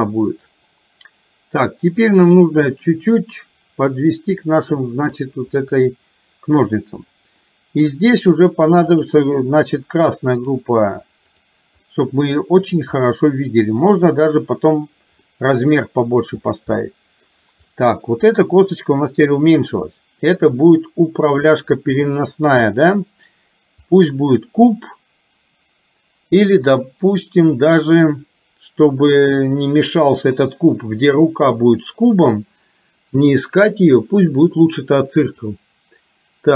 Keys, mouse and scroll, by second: 2.2-5.7 drag, 5.7-6.8 middle drag, 9.0-10.6 drag, 11.3 click, 12.0 middle click, 15.3 middle click, 16.8 middle click, 20.7-24.1 drag, 27.6-34.5 drag, 35.3 click.